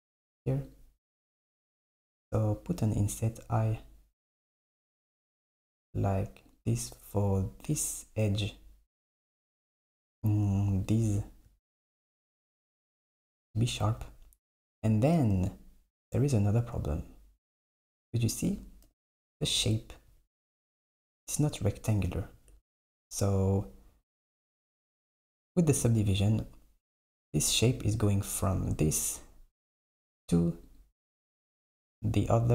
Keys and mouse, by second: 0.7 click, 7.6 click, 9.9-11.0 drag, 12.3 alt+click, 14.6 Tab, 17.4 click, 18.9 KP_7, 22.5 Tab, 24.4 click, 25.8-28.7 drag, 30.7 click.